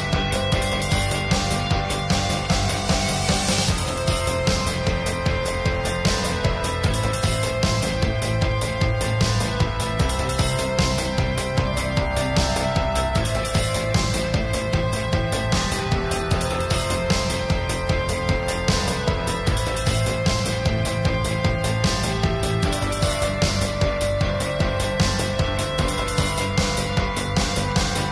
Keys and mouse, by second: 0.6 ctrl+s, 0.7 middle click, 0.9 click, 1.1 middle click, 1.4 click, 1.9 ctrl+s, 2.4-2.8 drag, 2.8 middle click, 3.4-5.9 middle drag, 6.1-7.1 drag, 7.7 click, 8.2 ctrl+s, 8.4 drag, 8.6-9.0 ], 9.6 middle click, 9.8-11.1 drag, 11.1-11.7 middle drag, 11.3 click, 11.9-12.7 middle drag, 13.5 ctrl+s, 13.7 middle drag, 14.1 middle drag, 15.2-16.1 middle drag, 16.6-17.5 middle drag, 17.2 ctrl+s, 17.7 middle click, 18.2-18.6 [, 19.0-19.9 middle drag, 19.6 click, 19.9-20.7 middle drag, 20.7 ctrl+s, 20.8 middle drag, 21.3-22.3 middle drag, 22.4 middle drag, 22.7 ctrl+s, 22.8-23.2 middle drag, 23.2-23.6 middle drag, 24.4 ctrl+s, 24.5 drag, 24.8 ctrl+s, 26.0 x, 26.3-27.8 drag, 27.8 middle click.